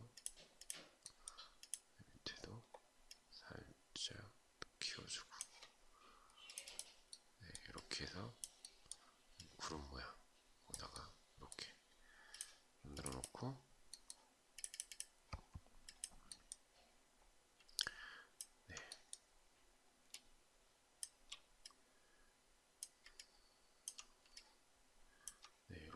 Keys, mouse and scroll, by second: 17.3 alt+click, 19.7 shift+click, 22.7 alt+click, 23.8 alt+click.